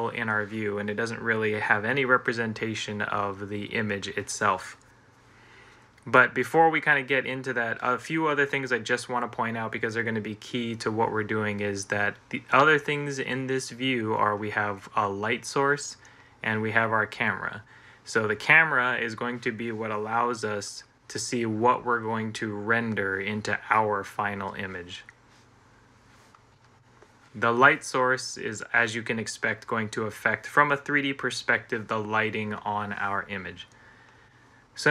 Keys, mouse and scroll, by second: 20.5-24.0 middle drag, 26.4 middle click.